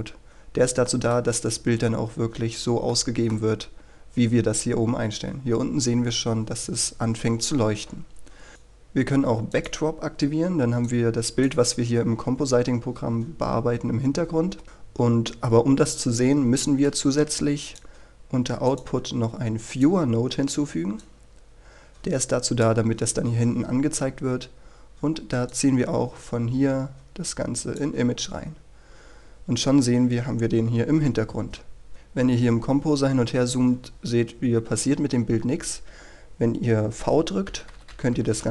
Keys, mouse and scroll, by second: 0.3-0.9 scroll up 1, 0.9 middle click, 2.3-2.9 scroll up 1, 2.9 middle click, 3.6-6.4 scroll down 1, 8.5-12.1 drag, 12.4-13.2 scroll down 1, 13.2 scroll up 1, 14.5-15.2 scroll down 1, 15.2 scroll up 1, 17.7-22.9 drag, 24.3 scroll down 1, 24.5-25.5 scroll up 1, 25.5-27.9 drag, 28.5-32.3 scroll down 1, 32.3 scroll up 1, 32.5 scroll down 1, 32.7 scroll up 1, 32.9 scroll down 1, 33.1 scroll up 1, 33.3-34.4 scroll down 1, 37.5 typing.